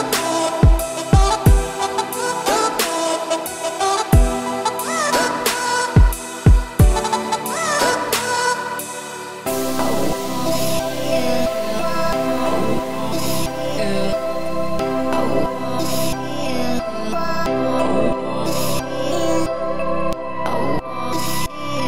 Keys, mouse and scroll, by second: 3.5 m, 6.3-9.6 drag, 9.6 middle click, 10.1 a, 10.4-10.8 scroll up 2, 10.8 alt+e, 16.3 scroll down 2, 16.3 middle click, 17.0 a, 17.2-17.9 scroll up 3, 17.9 shift+n, 19.4-20.7 middle drag, 20.7 Tab, 21.3 scroll down 1, 21.4-21.8 middle drag.